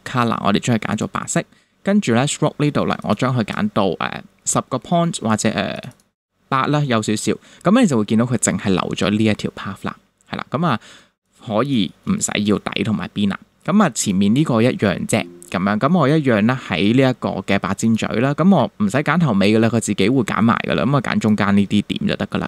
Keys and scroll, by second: 10.5 super+-, 11.0 super+space, 11.9 space.